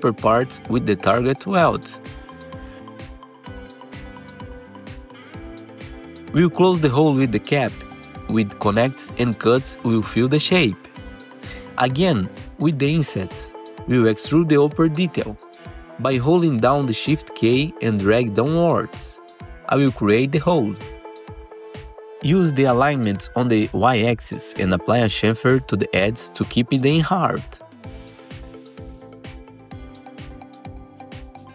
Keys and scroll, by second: 0.4 F3, 2.0 Delete, 2.4 1, 2.7 F3, 3.3 ctrl+shift+w, 4.5 F3, 5.8 3, 6.3 alt+q, 6.4 F3, 8.9 1, 11.3 ctrl+shift+e, 11.8 alt+c, 13.7 4, 21.6 F3, 25.5 F3, 26.1 F3, 30.3 ctrl+shift+c.